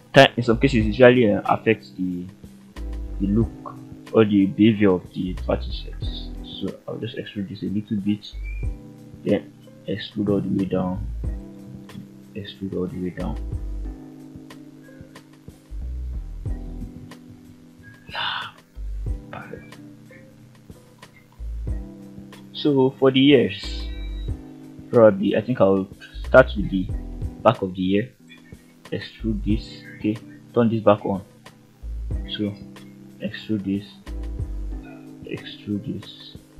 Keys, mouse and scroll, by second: 8.1 click, 8.9 e, 11.3 click, 11.7 e, 14.2 click, 14.6-14.9 scroll down 2, 14.9-17.8 middle drag, 18.0-18.3 scroll up 2, 18.5 shift+middle click, 18.9-20.1 shift+scroll up 4, 20.1 middle click, 21.1 shift+middle click, 21.7 scroll up 1, 22.1 middle click, 23.1 click, 23.7 shift+middle click, 24.0-24.4 scroll up 1, 24.8 g, 26.5 click, 26.9 middle click, 28.0 ctrl+right click, 30.0 shift+Tab, 31.5 g, 33.0 click, 33.6-34.1 middle drag, 34.9 ctrl+right click, 35.5 ctrl+scroll down 2, 35.9 shift+middle click.